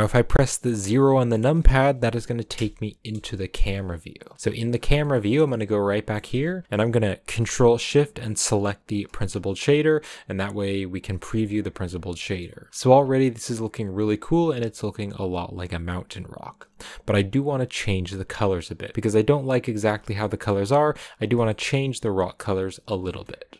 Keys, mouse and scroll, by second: 2.5 KP_0, 3.0 KP_0, 3.5 KP_0, 4.3 scroll up 3, 4.7 scroll down 4, 5.1-8.6 middle drag, 8.6 ctrl+shift+click, 11.1 ctrl+shift+click, 12.2 shift+middle click, 12.3-13.1 scroll up 2, 13.1 click, 13.8-14.4 scroll up 1, 14.4-17.3 scroll up 1, 17.3-19.8 scroll up 1, 19.8-20.1 scroll up 1, 20.1 shift+middle click, 20.5 scroll up 3, 21.4 shift+middle click, 21.7 scroll up 2, 23.5 middle click.